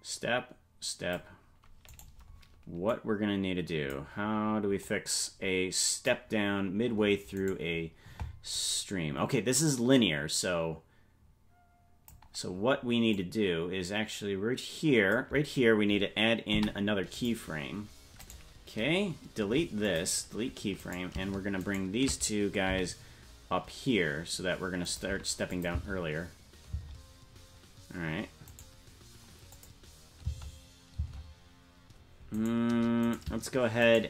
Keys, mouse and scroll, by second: 2.0 right click, 2.9-4.0 drag, 4.8-6.1 drag, 7.6 right click, 8.5-12.1 drag, 13.1-15.2 drag, 16.5 i, 18.2-19.4 right drag, 19.4 Delete, 20.8 right click, 21.7 shift+right click, 22.6 g, 25.5 click, 25.7 space, 27.9 space, 28.5 right click, 29.5 click, 30.2 space, 31.9 space, 32.3 right click, 33.9 shift+right click.